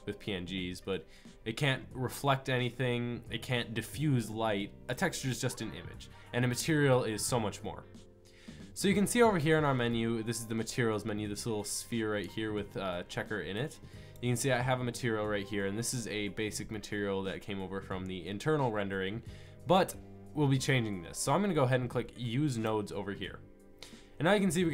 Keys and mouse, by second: 13.5 click, 14.0 click, 15.4-22.5 middle drag.